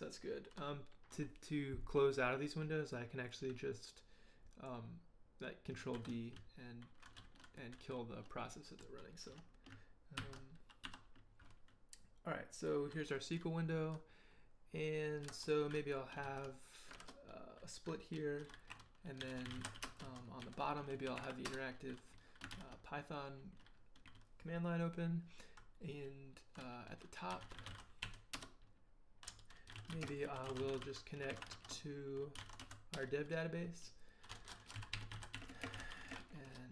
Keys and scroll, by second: 5.9 ctrl+d, 10.2 ctrl+b, 10.8 1, 16.2 ctrl+b, 19.0-21.6 typing, 22.5 ctrl+k, 27.1-33.1 typing, 34.5-36.7 typing.